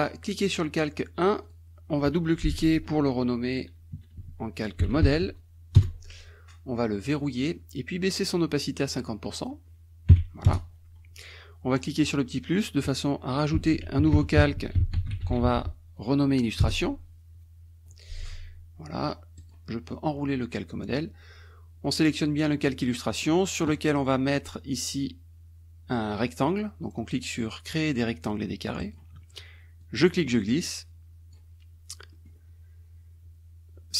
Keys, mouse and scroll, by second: 1.3 click, 3.9 m, 4.9 e, 5.8 Return, 7.3 click, 9.3 click, 10.5 Return, 12.0 click, 13.3-15.8 typing, 16.6 Return, 19.4 click, 22.9-29.1 drag, 29.8-31.5 drag, 32.3 click.